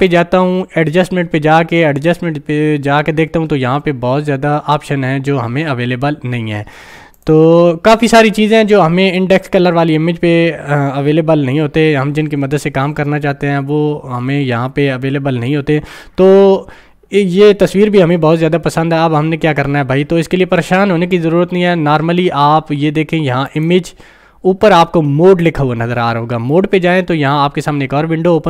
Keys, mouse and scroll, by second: 0.0 ctrl+click, 7.2 ctrl+click, 23.5 ctrl+click.